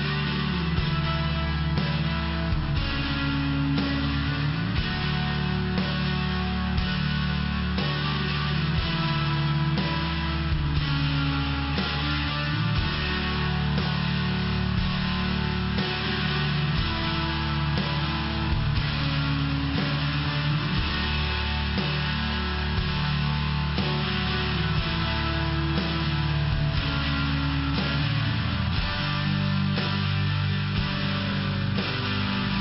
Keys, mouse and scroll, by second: 2.0 click, 3.2 click, 6.4 click, 9.3 click, 11.1 click, 11.4 click, 11.8 click, 11.9 click, 13.7 click, 14.6 click, 15.8 click, 17.9 click, 18.8 click, 21.3 click, 23.0 click, 26.0 click, 26.1 click, 26.7-27.8 typing, 27.9 Return, 28.3 Return, 28.8 Return, 29.6 Return, 30.4 click, 32.3 click.